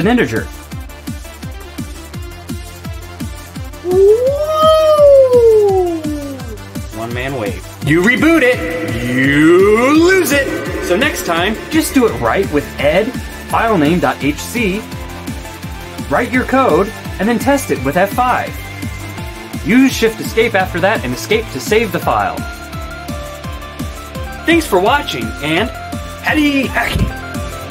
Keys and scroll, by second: 0.0-1.8 typing, 2.2 Return, 11.8-18.2 typing, 18.6 F5, 20.9 shift+Escape, 21.8 Escape.